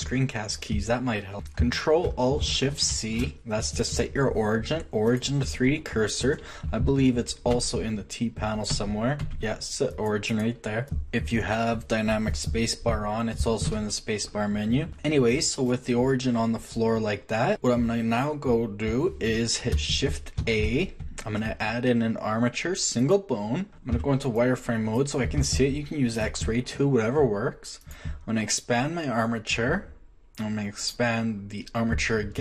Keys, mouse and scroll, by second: 0.8-1.3 drag, 2.9 ctrl+alt+shift+c, 7.5 t, 8.7 t, 9.3 t, 10.9 t, 13.7 space, 14.9 space, 20.4 shift+a, 23.9 z, 24.5-25.3 middle drag.